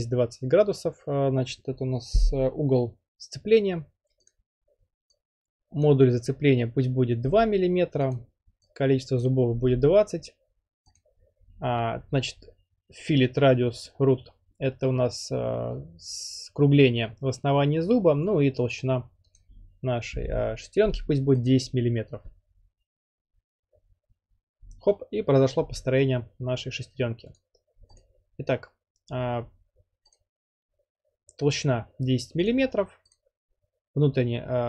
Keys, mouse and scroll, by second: 4.3-5.4 drag, 8.1 click, 8.1 typing, 9.5 click, 10.3 typing, 11.0-12.0 drag, 19.3 click, 19.9-20.9 typing, 21.5-22.5 drag, 27.4 click, 28.0 click, 30.1 click, 32.5 click, 33.1 click.